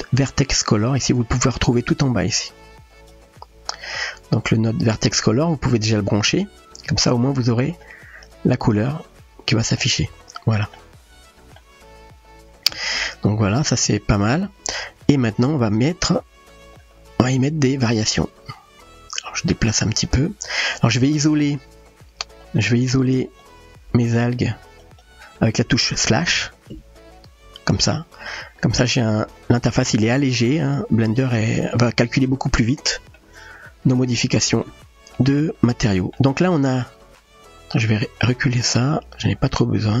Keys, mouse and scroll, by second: 7.0-8.5 drag, 10.1-11.6 middle drag, 12.4-13.6 shift+middle drag, 14.3-15.2 middle drag, 16.7 click, 20.6-22.1 drag, 22.8 click, 24.3-24.8 shift+drag, 25.3 shift+click, 27.2 KP_Divide, 28.3-29.8 middle drag, 30.7-31.1 shift+middle drag, 31.4-33.2 middle drag, 34.6-36.1 middle drag, 38.9-40.0 drag.